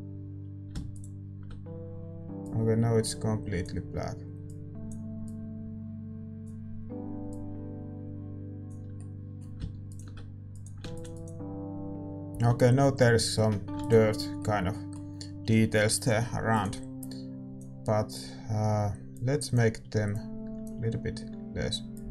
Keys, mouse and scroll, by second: 9.8-11.1 middle drag, 11.1 ctrl+s.